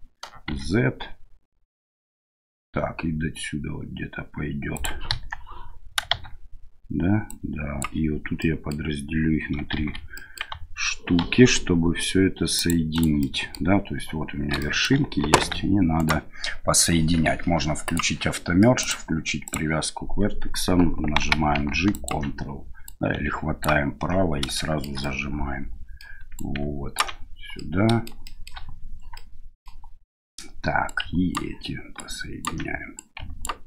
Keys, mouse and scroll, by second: 5.1 KP_1, 6.1 shift+z, 7.3 click, 8.4 middle click, 9.8 shift+z, 10.2 click, 11.2 ctrl+r, 13.3-13.6 drag, 14.6 shift+click, 15.4 1, 16.0 right click, 17.8 click, 18.8 click, 21.2 g, 22.8 ctrl+right click, 24.6 shift+middle click, 25.0-26.0 middle drag, 26.4 ctrl+right click, 27.6 middle click, 28.3 shift+middle click, 29.1 middle click, 30.9 ctrl+right click, 32.0 ctrl+right click, 32.9 ctrl+right click.